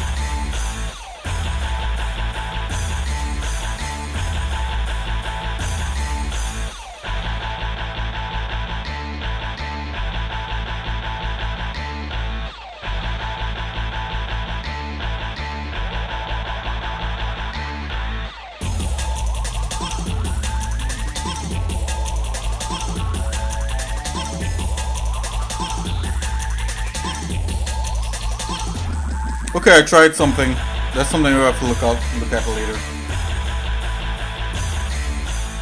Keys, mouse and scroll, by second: 0.2 click, 3.3 click, 5.3 click, 6.3 click, 7.6 click, 10.3 click, 12.1 click, 12.8-16.8 shift+middle drag, 19.7 click, 21.6 click, 23.6 click, 26.0 click, 27.2 click, 27.8 middle click, 33.9 shift+middle click, 34.3 scroll down 1, 34.4 scroll up 1, 34.5-34.9 scroll down 2, 35.2 shift+middle click.